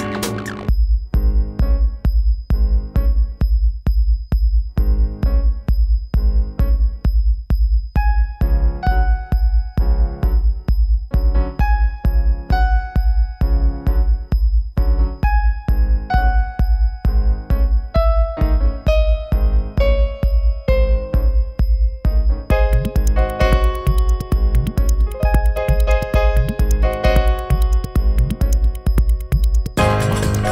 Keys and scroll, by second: 8.5 4, 23.9 3.